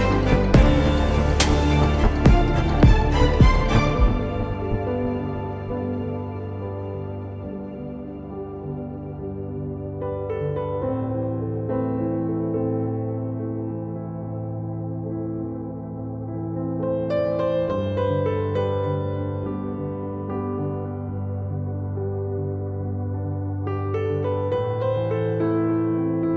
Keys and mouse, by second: 0.5 Tab, 0.7 z, 1.9 z, 2.7 s, 4.2 z, 5.1 r, 11.8 z, 12.0 z, 14.5 z, 18.5 click, 18.7 z, 19.4 Tab, 21.8 s, 24.6 ctrl+Tab.